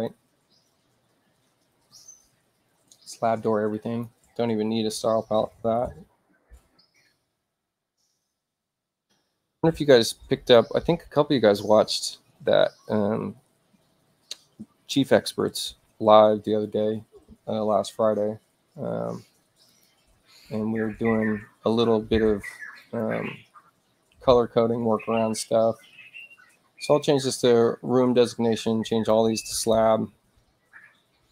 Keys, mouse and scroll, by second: 3.7 click, 5.2-6.1 typing, 18.3 middle click, 19.6 click, 22.7 click, 26.8 click, 28.8 click.